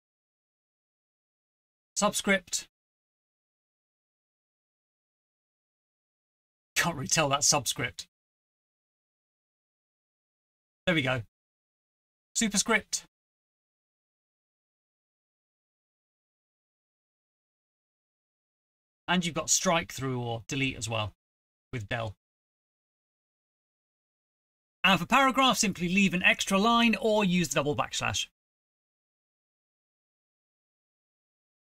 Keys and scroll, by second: 0.2 Return, 0.5 Up, 0.7 Return, 0.7 Return, 0.8 Up, 1.0 ctrl+v, 1.3-4.0 typing, 8.8 ctrl+c, 9.0 ctrl+v, 12.1 shift+Home, 12.3 ctrl+c, 12.4 End, 12.6 ctrl+v, 12.9 Left, 13.3-14.9 typing, 13.4 Up, 13.5 End, 14.9 Right, 18.1 Return, 18.4 Return, 18.4 Up, 18.9 ctrl+v, 19.1 Left, 19.3-20.7 typing, 20.4 shift+Left, 28.1 ctrl+c, 28.2 Right, 28.3 Page_Up, 28.5 Home, 28.6 Return, 28.7 Return, 28.7 Up, 28.7 ctrl+v, 28.9 typing, 29.0 ctrl+v, 29.1 ctrl+v, 31.2 typing.